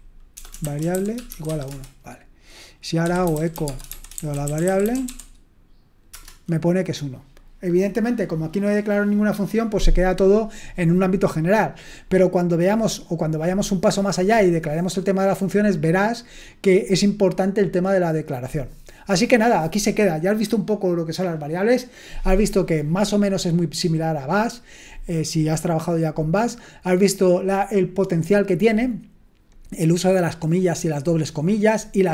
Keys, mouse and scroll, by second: 0.0-6.1 typing, 6.1 Return.